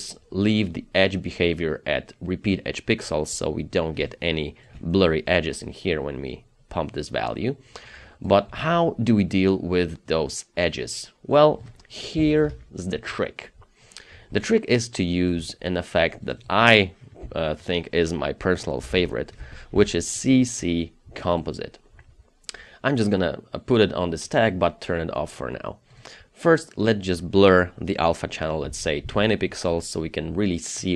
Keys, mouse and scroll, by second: 4.0 space, 12.2 KP_0, 12.5 Return, 13.7-14.3 scroll down 1, 14.3 space, 16.4 double click, 17.3 Delete, 18.9 c, 19.1 c, 19.4 space, 19.7 c, 21.4 double click, 28.7 KP_2, 29.1 Return.